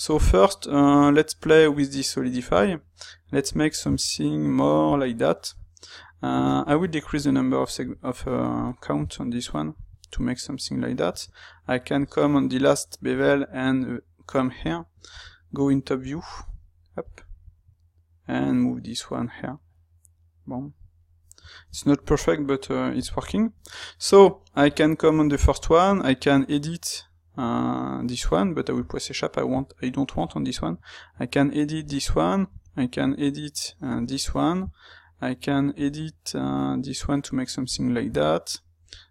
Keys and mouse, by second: 10.2 middle click, 14.3-15.0 middle drag, 15.0 KP_7, 15.1-39.1 middle drag.